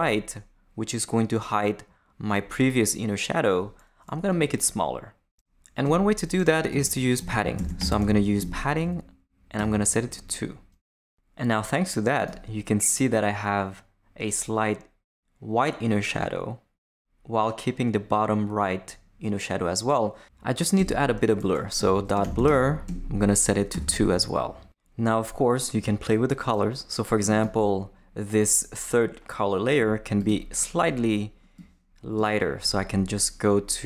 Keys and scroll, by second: 5.8 Return, 6.5-8.4 typing, 8.8 Left, 9.6 2, 20.8 Return, 21.5-23.7 typing.